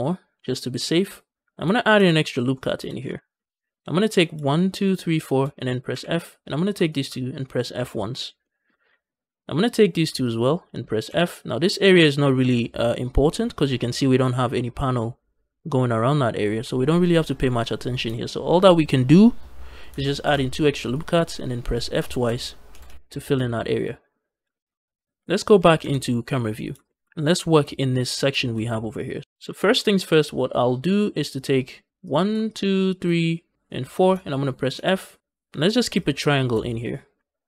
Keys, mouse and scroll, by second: 1.2 shift+click, 1.2 shift+g, 1.8 ctrl+r, 2.4 right click, 2.6 z, 3.0 shift+middle click, 3.3-4.0 scroll up 1, 4.0 click, 4.3 shift+click, 4.6 shift+click, 5.0 shift+click, 5.8 f, 6.3 click, 6.7 shift+click, 7.6 f, 8.0 scroll down 1, 8.3 shift+middle click, 8.7 z, 9.0 scroll up 1, 9.5 click, 10.1 shift+click, 10.9 f, 13.6 scroll down 1, 13.9 shift+middle click, 17.6 scroll up 2, 17.9 z, 20.1 ctrl+r, 21.6 click, 21.9 shift+click, 22.6 f, 22.7 f, 23.2 z, 23.5 scroll down 2, 23.7 middle click, 24.0 scroll up 2, 24.4 shift+middle click, 24.6 scroll up 1, 24.9 shift+middle click, 25.7 KP_0, 26.7 shift+middle click, 26.9-27.3 scroll up 2, 27.3 shift+middle click, 28.3 shift+middle click, 28.6 Tab, 28.7-29.2 scroll down 1, 29.2-30.3 scroll up 2, 29.4 shift+middle click, 30.3-31.9 scroll up 1, 31.9 click, 32.3 shift+click, 32.8 shift+click, 35.5 click, 35.5 f, 35.8 shift+click, 36.1 shift+click.